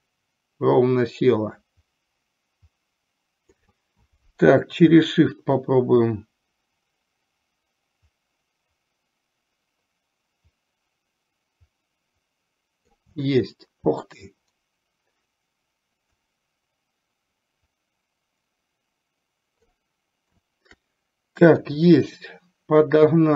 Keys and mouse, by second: 5.9-13.1 shift+drag, 16.5-19.9 shift+drag, 21.6 KP_7.